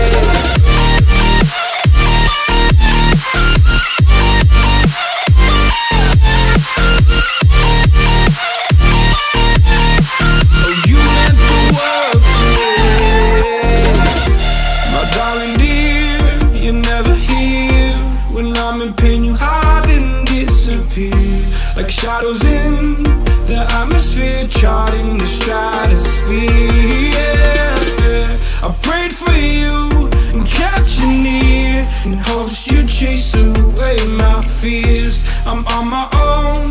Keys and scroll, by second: 0.5 space, 1.0 alt+super+space, 1.0 alt+super+space, 1.1 alt+super+space, 1.2 alt+super+space, 1.3 alt+super+space, 1.4 alt+super+space, 1.5 alt+super+space, 1.5 alt+super+space, 1.6 alt+super+space, 1.7 alt+super+space, 1.9-2.4 alt+super+space, 3.5 a, 8.4 a, 9.6 space, 10.1 alt+super+space, 10.2-10.9 alt+super+space, 11.3 a, 19.2-20.4 space, 20.9 space, 21.5 space, 26.3 space, 26.8 space, 27.0 a, 29.9 space, 30.4 space, 30.5 space, 31.4 `.